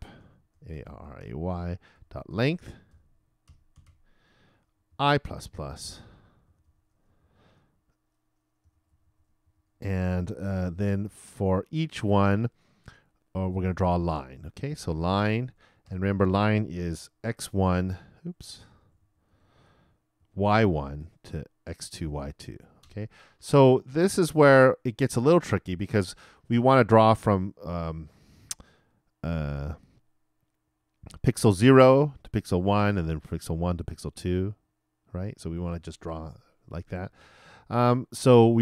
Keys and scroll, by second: 4.3-7.2 typing, 8.6 shift+[, 8.9 shift+Return, 9.3 shift+Return, 9.4 shift+], 15.6 shift+e, 15.8 shift+9, 16.9 shift+-, 17.5 shift+Return, 18.4 shift+BackSpace, 19.6 shift+BackSpace, 20.2 shift+0, 20.6 shift+;.